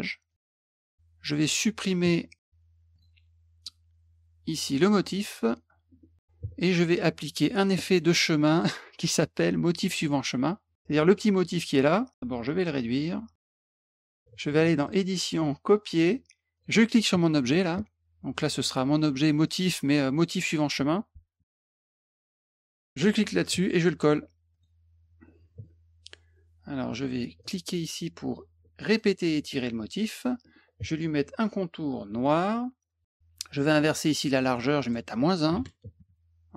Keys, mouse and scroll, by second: 0.3 click, 2.9 click, 5.2 click, 7.2 click, 8.6 click, 9.8 click, 10.7 middle click, 11.4 click, 12.5 click, 13.6-14.0 ctrl+drag, 14.8 click, 15.9 click, 16.5 click, 17.4 click, 19.4 click, 19.6 click, 20.1 click, 21.3-22.7 typing, 23.0 click, 24.5 click, 25.2 middle click, 27.4 click, 28.9 click, 32.1 middle click, 34.8 click.